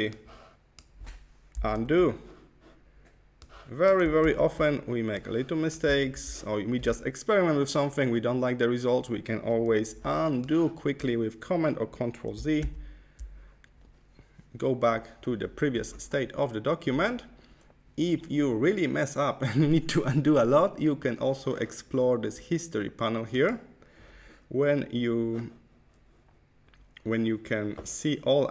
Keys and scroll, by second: 1.7 super+z, 4.2 super+z, 6.0 super+z, 12.7 super+z.